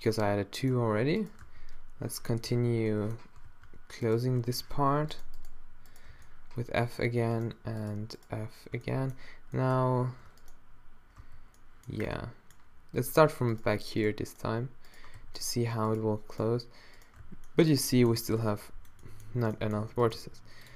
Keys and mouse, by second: 1.4 d, 2.4 z, 3.5 z, 4.0 super+middle click, 4.8 z, 6.1 f, 8.3 shift+right click, 11.2 f, 12.3 middle click, 15.2 f, 17.3 f, 18.2 a, 19.0 middle click, 20.2 g.